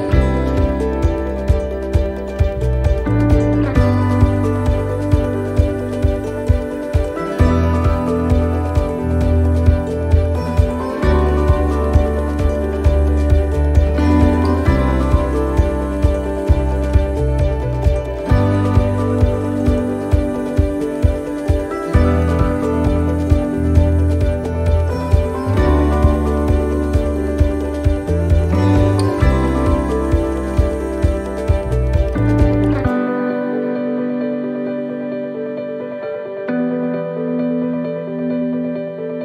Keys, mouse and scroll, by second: 0.4 click, 0.4 scroll up 1, 1.1 middle click, 1.9 middle click, 3.0 click, 4.9 ctrl+r, 6.4 ctrl+r, 9.9 ctrl+r, 11.7 middle click, 12.1 scroll up 2, 13.1 middle click, 13.7 ctrl+r, 17.7 click, 18.5 right click, 19.2 click, 20.5 right click, 20.7 right click, 21.5 click, 23.2 right click, 24.5 click, 25.8 right click, 26.7 click, 28.2 right click, 28.9 click, 29.8 middle click, 31.2 right click, 31.8 click, 33.5 right click, 34.6 click, 36.2 right click, 37.0 click, 38.1 middle click, 39.0 right click.